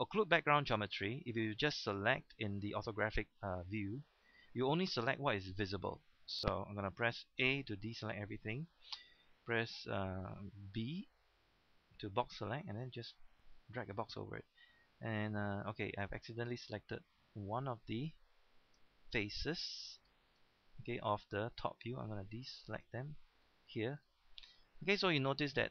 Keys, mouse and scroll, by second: 7.0-7.4 typing, 10.6-11.3 typing, 12.3-13.7 drag, 17.7-18.0 scroll up 1, 19.5-20.2 scroll up 1, 20.4 shift+middle click, 20.8-21.2 scroll up 1, 23.3-23.7 scroll down 1, 24.1 shift+middle click, 25.0-25.7 scroll up 1.